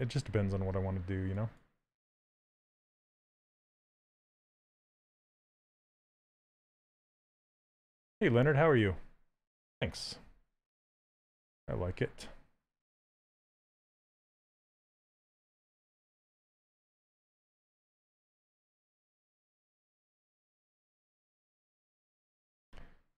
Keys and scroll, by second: 8.0 s.